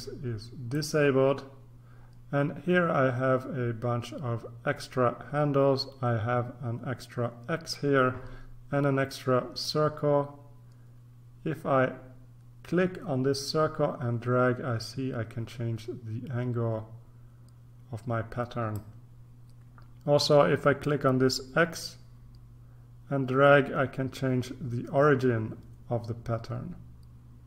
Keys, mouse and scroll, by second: 0.7 click, 9.6-19.3 drag, 21.7-27.4 drag.